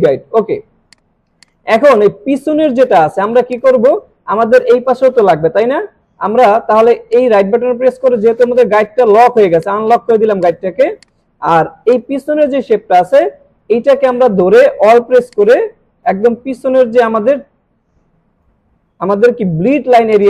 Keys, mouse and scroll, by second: 0.9 click, 7.1 right click, 8.4 click, 15.3-18.7 alt+drag, 20.1 click.